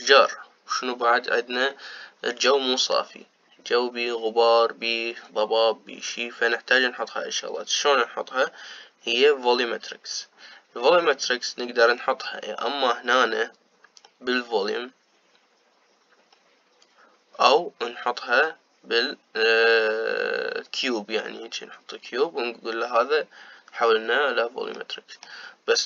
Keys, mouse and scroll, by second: 12.9-19.8 middle drag, 25.4-25.8 middle drag.